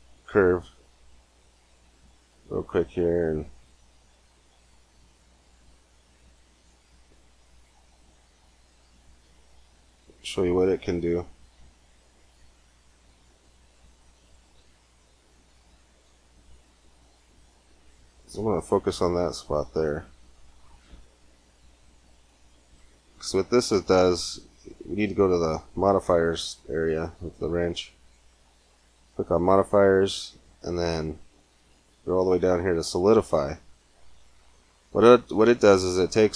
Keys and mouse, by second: 3.9-8.7 drag, 9.4 middle click, 11.4 Tab, 12.4 g, 14.1-15.6 drag, 14.4 e, 19.2 KP_Decimal, 24.1 middle click, 24.5-26.4 drag, 26.4-27.8 middle drag, 27.8-29.8 drag, 33.9-36.3 middle drag.